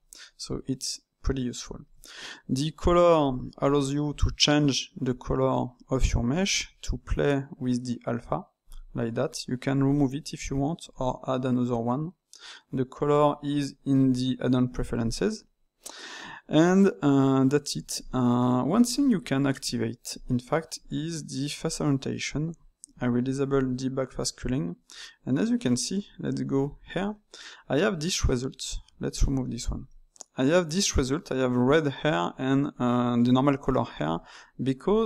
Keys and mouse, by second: 2.8 click, 9.7-13.8 drag, 18.0-20.1 middle drag, 20.1-23.2 drag, 24.3-26.4 middle drag, 26.4 KP_Divide, 27.1-29.0 middle drag, 29.0 click, 29.6-34.7 ctrl+middle drag, 34.7-35.0 drag.